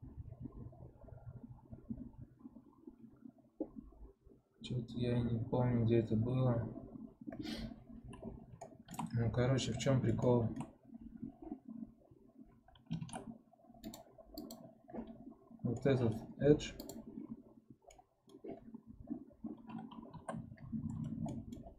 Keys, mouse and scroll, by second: 8.5 shift+middle click, 9.0-9.7 scroll up 2, 9.7-14.4 middle drag, 14.4 click, 16.7-17.9 drag, 17.9-20.1 middle drag, 20.1 3, 20.9-21.2 scroll up 1, 21.2 middle click, 21.6-21.7 scroll down 1.